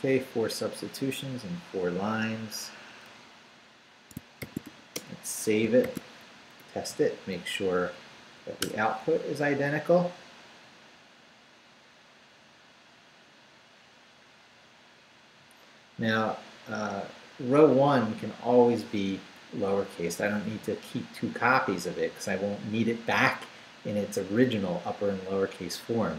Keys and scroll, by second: 3.0 Return, 4.2-5.8 typing, 5.6 shift+Return, 6.3 shift+Up, 8.6 Return.